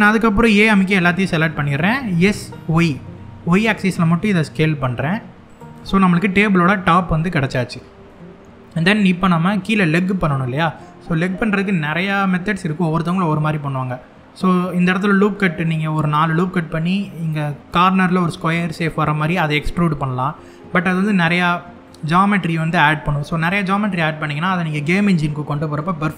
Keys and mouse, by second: 0.2 a, 1.8 s, 2.3 y, 5.2 click, 5.5-7.4 middle drag, 7.7 middle click, 9.5 middle click, 10.0 middle click, 11.6 middle click, 18.5 middle click, 21.5 middle click.